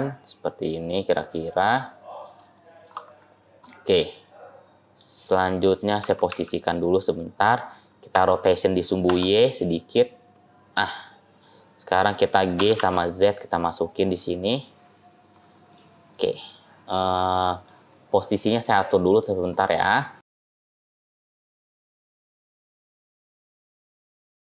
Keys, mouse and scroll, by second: 1.3 middle click, 2.4 shift+middle click, 2.9-3.4 scroll down 1, 3.4 scroll up 1, 3.5 scroll down 2, 4.1 middle click, 4.1 scroll up 1, 5.0 scroll up 1, 5.9 g, 8.0 r, 11.0 middle click, 12.4 g, 15.6 middle click, 16.0 middle click, 16.9 middle click, 17.8-18.2 scroll down 2, 18.2 scroll down 1, 18.2-18.9 scroll down 2, 18.5-18.9 scroll up 1, 18.9-19.8 scroll down 7, 19.4 middle click, 20.2 g, 21.0 middle click, 21.0 g, 21.2 shift+middle click, 21.3-21.9 scroll up 4, 21.5 middle click, 21.6 click, 21.6 middle click, 21.9 shift+middle click, 22.2 middle click, 22.5 click, 22.6 r, 23.2 g, 23.8 r.